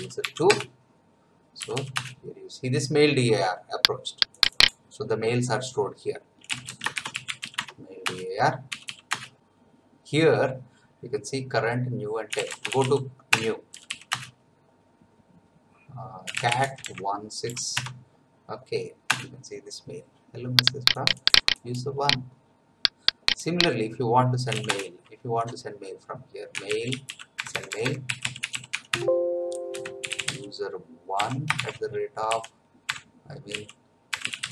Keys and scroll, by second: 0.0-1.6 typing, 1.9 Return, 6.2-8.7 typing, 8.0 Return, 9.1 Return, 12.0-13.7 typing, 14.1 Return, 16.0-17.3 typing, 17.7 Tab, 19.1 Return, 24.2-25.0 typing, 26.3-34.5 typing.